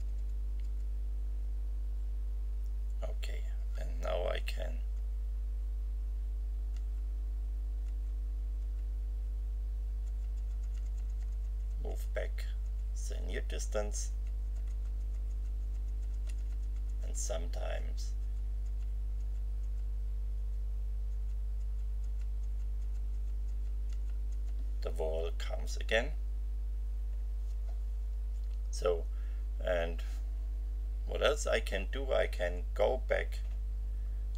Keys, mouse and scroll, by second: 4.9 F5, 6.7 F5, 7.8 F5, 8.6 F5, 10.0 F6, 20.3 F6, 21.1 F6, 32.3 F12.